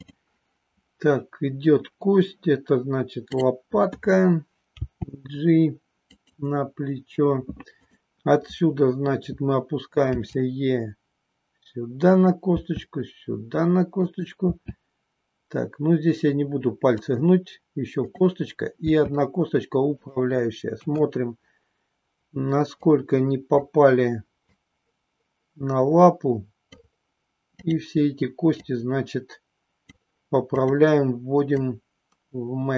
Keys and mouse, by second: 3.3 click, 4.9 g, 6.3 click, 7.7 click, 10.1 e, 12.1 click, 12.6 e, 14.0 click, 16.9 click, 18.0 click, 18.9 e, 20.0 click, 20.8 KP_1, 23.0 click, 24.4-26.8 drag, 27.5 click, 28.6-29.9 drag, 31.6-32.7 drag.